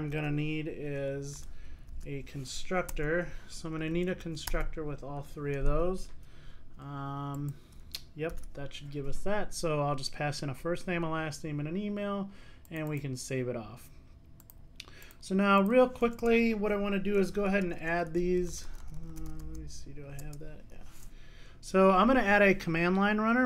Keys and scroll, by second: 2.0 super+n, 8.4 super+s, 20.4 Return.